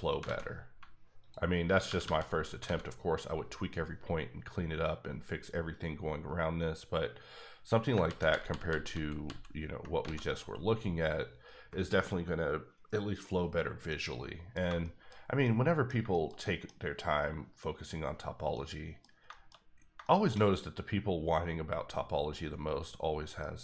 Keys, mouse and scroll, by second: 0.2 alt+a, 1.2 alt+click, 1.9 g, 2.0 g, 2.5 click, 2.6 alt+a, 6.8 scroll down 1, 7.2 scroll up 1, 8.0 ctrl+z, 8.3 ctrl+z, 8.7 ctrl+z, 8.9 ctrl+z, 9.8 ctrl+z, 10.0 alt+a, 13.5 scroll down 1, 13.6 scroll up 1, 13.9 middle click, 15.2 scroll down 1, 15.4 middle click, 16.7-18.2 scroll up 2, 18.2 scroll down 1, 18.5 middle click, 19.5 scroll up 2, 20.0 shift+middle click, 20.5-21.6 scroll up 1, 23.1 scroll up 1, 23.4 middle click.